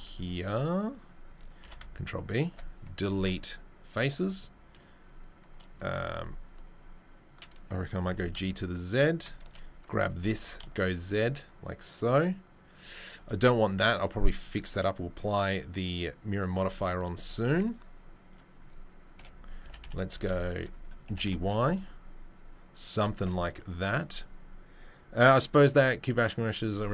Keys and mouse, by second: 1.6 ctrl+b, 3.1 Delete, 4.1 1, 5.8 2, 8.0 g, 9.4 1, 9.7 right click, 10.1-26.9 middle drag, 10.1 g, 14.4 Tab, 16.6 Tab, 19.1 KP_7, 19.6 g, 21.0 g, 23.2 Tab.